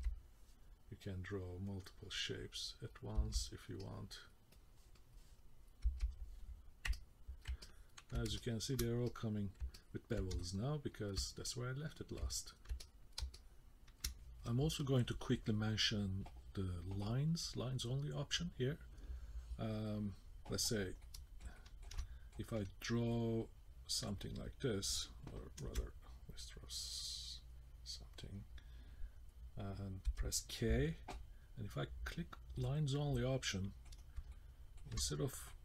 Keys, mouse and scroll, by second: 0.0 k, 1.0 click, 3.2 k, 3.8 click, 4.5 click, 5.0 click, 5.4 click, 5.9 k, 6.9 middle click, 7.6 ctrl+middle click, 8.4 shift+middle click, 9.1 middle click, 9.8 ctrl+middle click, 10.4 shift+middle click, 11.5 middle click, 12.3 ctrl+middle click, 12.8 middle click, 13.3 shift+middle click, 21.0 middle click, 21.5 shift+middle click, 22.0 middle click, 23.1 click, 26.4 click, 26.4 BackSpace, 30.1 k, 32.7 click, 33.4 middle click, 34.0 scroll up 2, 34.3 shift+middle click, 35.1-35.5 scroll up 1, 35.5 middle click.